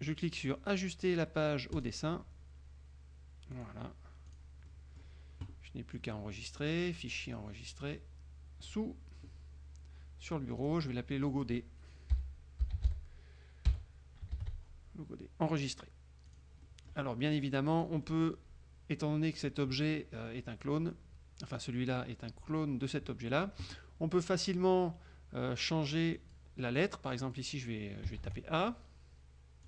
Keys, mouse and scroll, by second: 1.9 click, 3.7 click, 4.4 click, 4.8 middle click, 7.0 click, 8.7 click, 10.7 click, 11.3 click, 12.3 l, 12.7 o, 14.5 shift+d, 15.5 click, 16.4 click, 17.9 click, 26.3 click, 27.4 click, 28.3 shift+a.